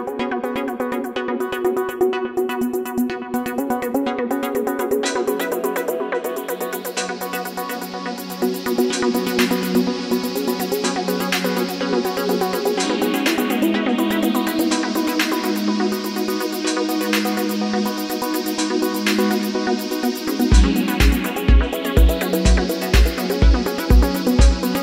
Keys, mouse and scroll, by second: 5.0 ctrl+-, 5.3 ctrl+-, 7.1 ctrl+0, 14.2 double click.